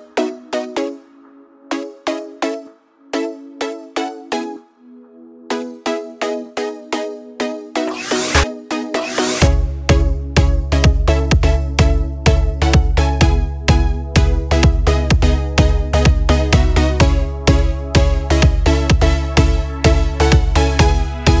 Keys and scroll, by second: 14.5 Up, 15.5 Up, 17.9 Up, 18.5 Up.